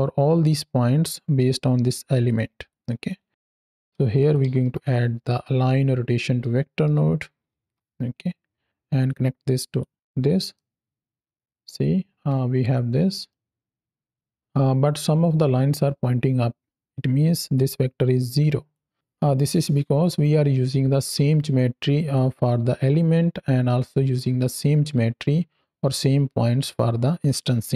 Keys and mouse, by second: 2.6 click, 3.3 click, 7.5 Down, 7.6 Down, 8.9 click, 10.4-12.1 middle drag, 12.3 space, 13.1-14.3 middle drag, 17.4-18.6 drag.